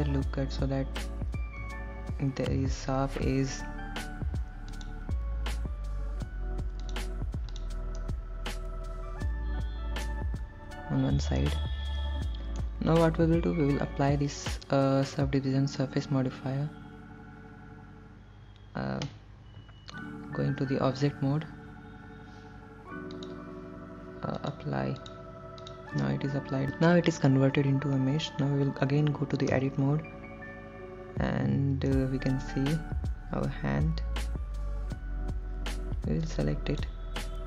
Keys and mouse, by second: 2.9 ctrl+r, 7.1 click, 7.8 click, 8.2-10.3 middle drag, 11.7-12.9 middle drag, 21.4 Tab, 23.5 click, 24.8 click, 25.9 click, 29.8 Tab, 32.1-36.0 middle drag, 36.5 click.